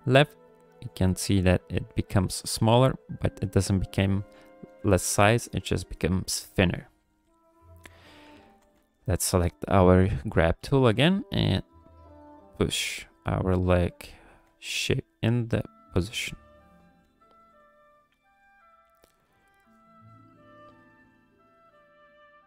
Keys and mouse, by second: 4.6 KP_1, 7.1 KP_3, 7.8 ctrl+click, 8.5 g, 8.7 f, 10.0 click, 11.2 click, 12.1 click, 12.5 click, 14.0 click, 14.4 f, 15.2 click, 17.0 f, 17.5 click, 18.1 f, 18.9 click, 19.7 click, 20.2 click, 20.5 click, 21.1 shift+click, 21.7 click.